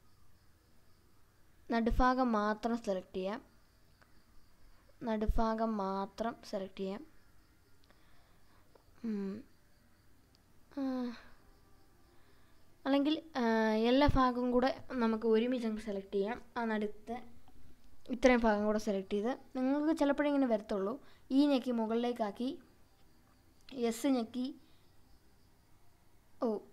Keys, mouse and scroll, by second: 0.2 scroll up 1, 1.3-3.1 drag, 4.3 click, 5.0-6.1 drag, 6.7 scroll up 1, 7.2-7.5 scroll down 2, 8.9 f, 9.6 click, 10.4 scroll down 1, 10.9-11.7 scroll up 2, 12.5 click, 13.2 click, 14.7 f, 15.4-15.8 scroll down 2, 16.1 scroll up 1, 17.2 click, 19.0 e, 23.0 click, 24.8 s, 26.3 right click.